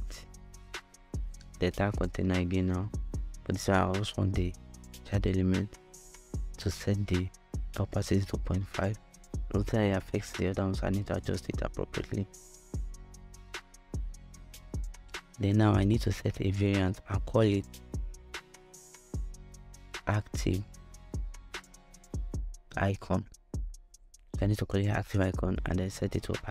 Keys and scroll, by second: 5.0 5, 5.2 Return, 9.7 |, 9.9 Return, 17.6-21.6 typing, 21.7 Return.